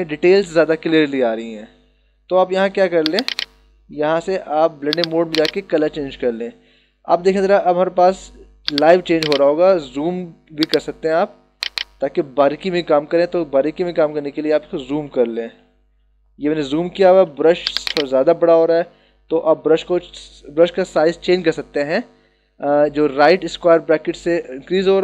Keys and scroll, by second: 7.1 ctrl+=, 12.9 [, 18.5 [, 23.7 ].